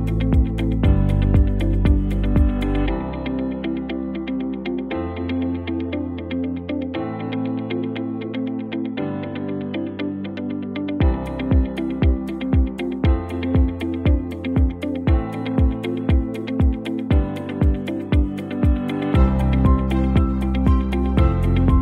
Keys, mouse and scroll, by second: 1.0 click, 3.1 right click, 3.6 click, 4.4 ctrl+Tab, 5.1 ctrl+v, 6.3 click, 9.5 ctrl+t, 10.2-11.4 drag, 13.5 alt+scroll up 1, 14.1 space, 14.2-15.2 click, 14.6 space, 14.7 click, 15.0 space, 15.9-17.1 drag, 19.8 alt+scroll down 1.